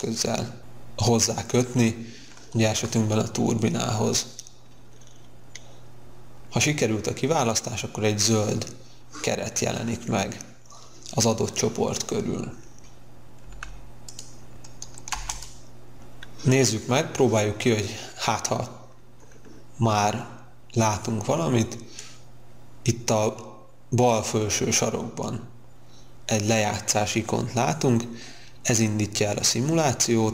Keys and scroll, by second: 15.0 space.